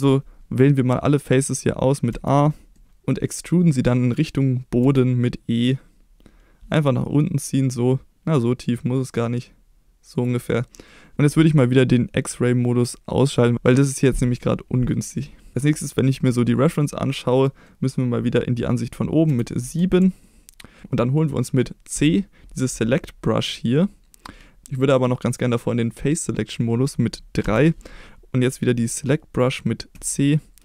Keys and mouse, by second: 2.1 a, 2.8 middle click, 4.9 e, 10.2 click, 10.5 middle click, 13.3 click, 15.1 middle click, 17.4 middle click, 19.3 KP_7, 20.3 shift+middle click, 22.0 c, 27.5 3, 29.9 c.